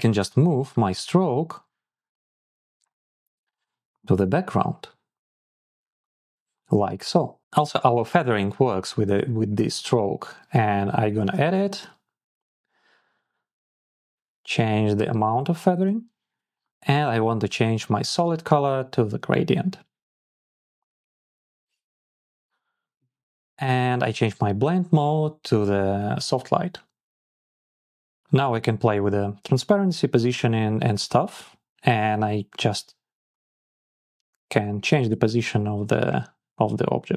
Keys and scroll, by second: 11.6 Down, 12.8 Up, 13.4 Down, 13.9 Down, 14.1 Up, 15.0 Up, 15.2 Down.